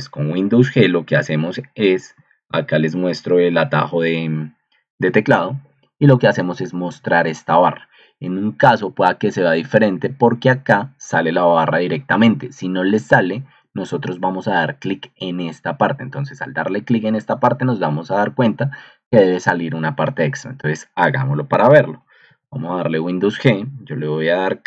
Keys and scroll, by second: 21.3 Escape, 22.2 super+g.